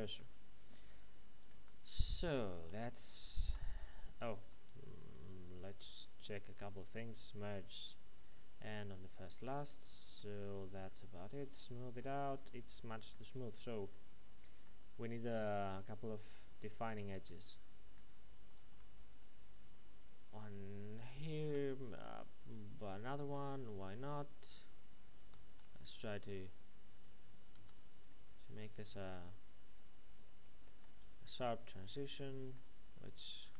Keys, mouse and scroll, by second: 1.5 Tab, 2.7 ctrl+2, 4.4 Tab, 7.3 click, 10.2 middle click, 10.5 Tab, 11.4 click, 12.0 middle click, 13.2 Tab, 13.9 middle click, 15.7 click, 17.2 middle click, 18.5 ctrl+r, 19.5 click, 21.3 ctrl+r, 21.9 click, 23.4 ctrl+e, 24.0 click, 25.6 ctrl+r, 25.7 click, 27.5 Tab, 28.1 middle click, 30.9 Tab, 31.2 middle click, 33.3 ctrl+e.